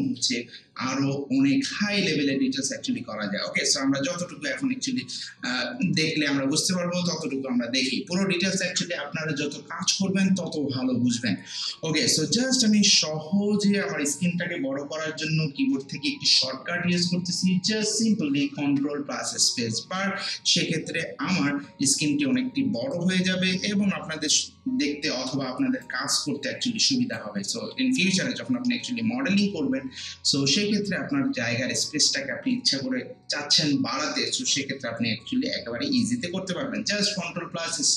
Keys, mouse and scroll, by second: 12.6 click, 18.5 click, 19.8 ctrl+space, 21.2-21.7 scroll down 1, 22.9-27.7 drag, 27.7 scroll down 1, 28.5 scroll up 1, 28.7 alt+middle click.